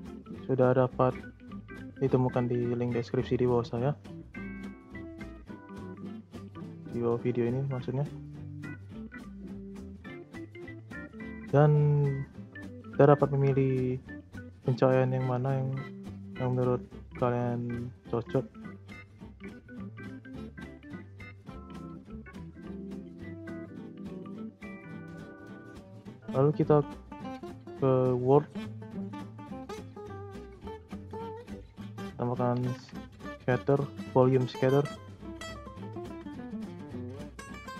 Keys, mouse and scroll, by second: 23.0-23.8 middle drag, 23.8 scroll up 1, 24.1-24.8 middle drag, 24.8-25.4 scroll down 2, 25.4-26.6 scroll up 1, 26.6-28.8 drag, 28.8 scroll down 2, 28.9 middle click, 29.6 scroll down 2, 29.8-30.7 scroll up 3, 29.9 middle click, 30.7 click, 31.3 click, 31.6 shift+a, 34.5-35.3 middle drag, 35.3 click, 35.7-37.0 scroll up 6, 37.0-37.7 middle drag.